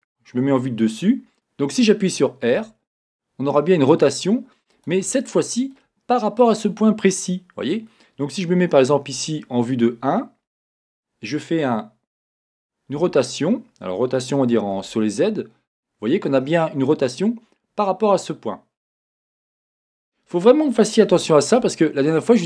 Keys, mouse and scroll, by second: 2.5 r, 4.9 click, 9.3-16.9 right drag, 12.9 r, 16.9-19.9 drag, 16.9-22.4 middle drag, 21.8-22.2 scroll.